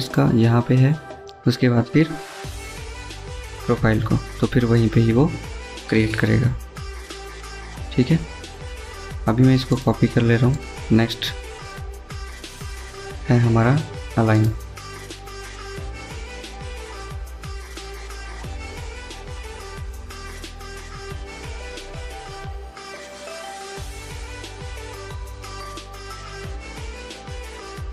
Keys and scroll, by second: 10.8-11.5 typing, 21.3 Escape, 21.5 Escape, 23.7 typing, 27.3-27.9 typing.